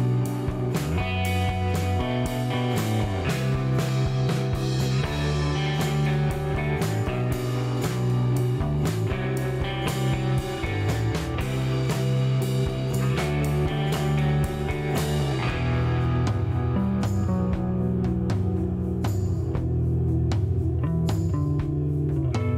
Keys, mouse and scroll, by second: 0.3 shift+right click, 1.4 scroll up 2, 2.5 click, 2.9 shift+right click, 4.7 ctrl+click, 6.2 click, 7.8-8.7 typing, 8.8 Return, 10.2 shift+right click, 13.8 click, 14.6 middle click, 15.9 scroll down 1, 16.3-18.4 middle drag, 19.6 click, 19.8 space, 21.9 scroll up 2.